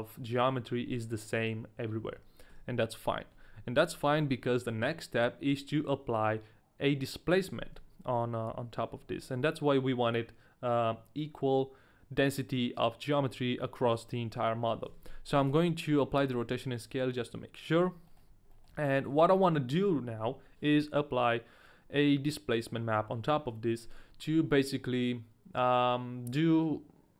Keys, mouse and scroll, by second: 3.3 Tab, 3.9 middle click, 8.2 shift+middle click, 8.4-8.9 scroll down 1, 9.0 shift+middle click, 9.0-9.7 scroll down 1, 15.1 ctrl+a, 16.5 middle click, 17.7 middle click, 18.2 shift+middle click, 18.2 scroll up 2, 18.5 middle click, 19.1 shift+middle click, 19.1-19.8 shift+scroll down 2.